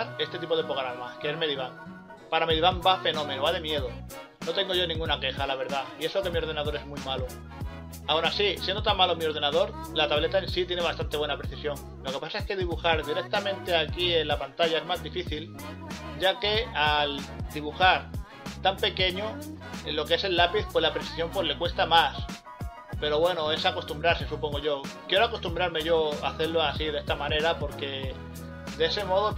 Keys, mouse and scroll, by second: 0.1 scroll down 1, 0.3 scroll up 1, 1.5 scroll down 1, 6.6 scroll up 1, 9.4 ctrl+z, 9.7 scroll up 1, 9.8 scroll down 1, 10.2 scroll up 1, 10.6 scroll down 1, 13.2 scroll up 1, 13.2 scroll down 1, 18.4 scroll up 1, 18.5 scroll down 1, 19.5 scroll up 1, 20.9 scroll up 1, 21.3 scroll down 1, 23.4 scroll up 1, 23.5 scroll down 1, 24.7 scroll up 1, 25.5 scroll down 1, 27.2 scroll up 1, 27.4 scroll down 1, 28.1 scroll up 1, 28.2 scroll down 1, 28.3 scroll up 1, 28.4 scroll down 1, 28.6 ctrl+z.